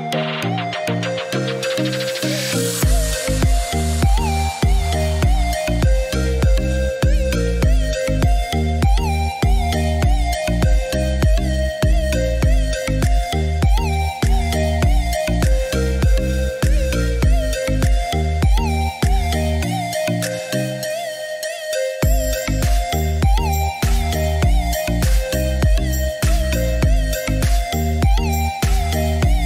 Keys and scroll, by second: 1.5 4, 2.0 7, 2.5 Return, 8.2 3, 8.5 5, 9.3 Return, 19.9 8, 20.3 1, 20.8 Return.